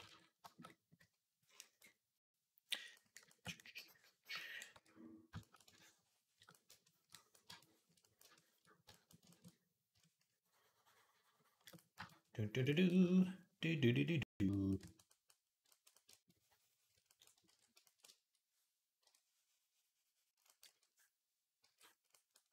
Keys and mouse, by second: 4.6 d, 17.3 ctrl+r, 18.8 i, 20.5 e, 21.5 d.